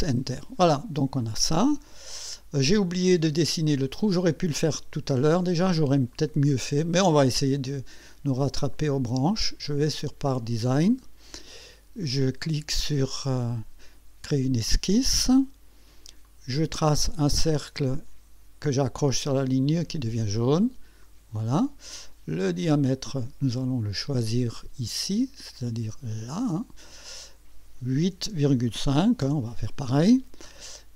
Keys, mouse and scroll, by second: 1.2-3.1 drag, 6.1 click, 8.7 click, 10.3 click, 13.1 click, 16.2 click, 19.4 click, 21.0 click, 21.6 right click, 23.0 click, 25.5 click, 26.4 click, 26.9 click, 28.2 KP_8, 28.6 KP_Decimal, 28.9 KP_5, 29.2 KP_Enter.